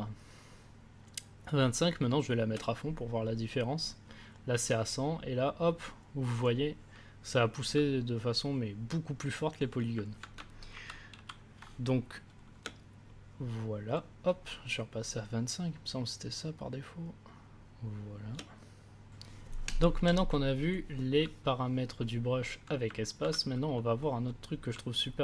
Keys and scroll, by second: 10.7 ctrl+z, 12.6 space.